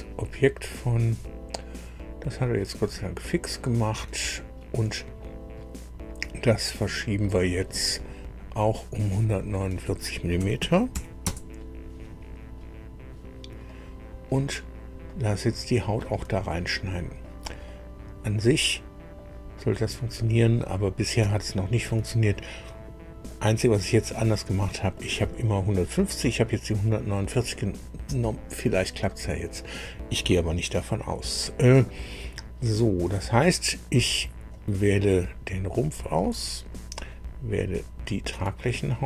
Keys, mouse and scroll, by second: 0.6-0.9 scroll down 1, 2.7 click, 9.4 click, 10.4 KP_1, 10.6 KP_4, 10.9 KP_9, 11.2 KP_Enter, 13.6 middle click, 15.0-16.1 middle drag, 16.6 shift+middle click, 17.6-19.3 shift+middle drag, 19.5 middle click, 20.2 middle click, 21.3 shift+middle click, 22.3-23.4 shift+middle drag, 23.9-25.1 drag, 34.5 click, 37.1 ctrl+click.